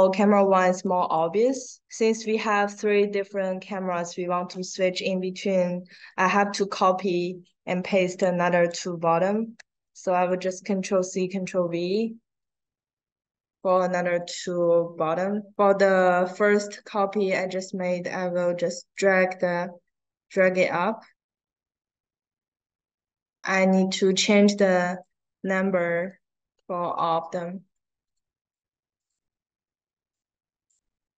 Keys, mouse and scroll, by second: 0.3 scroll down 1, 0.8 drag, 5.9 click, 8.0 click, 8.6 click, 11.8 click, 13.6 click, 14.1 click, 14.5 click, 16.0 click, 16.6 click, 17.0 click, 17.9 click, 18.9-20.3 drag, 21.1 click, 24.4 click, 24.9 click, 25.4 click, 26.8 click, 27.9 click, 28.5 click, 28.9 click, 30.0 click.